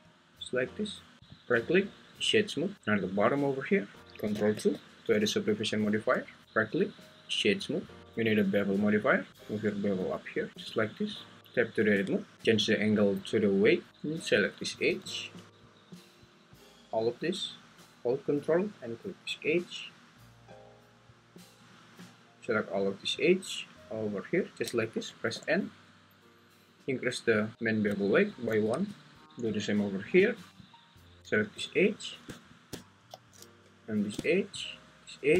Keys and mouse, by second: 1.2 `, 1.7-2.7 right drag, 4.7 ctrl+2, 6.5-8.0 right drag, 8.0 Tab, 8.0 `, 8.2-9.3 drag, 10.0-10.5 drag, 11.4 Tab, 11.4 `, 12.5-13.9 drag, 23.1 ctrl+click, 25.3 n, 28.1 click, 29.2 alt+Tab, 33.1 alt+z.